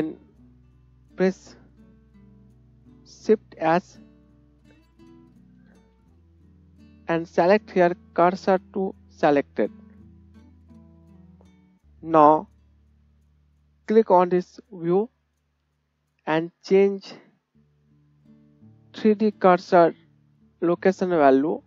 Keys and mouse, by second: 3.6 shift+s, 4.9 shift+s, 5.7 shift+s, 15.1-21.6 drag.